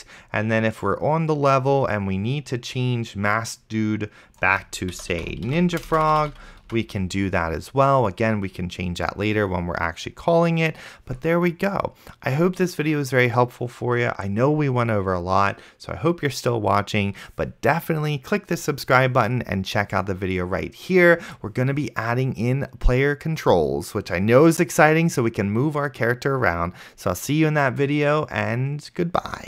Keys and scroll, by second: 4.9-6.9 typing, 6.9 ctrl+s.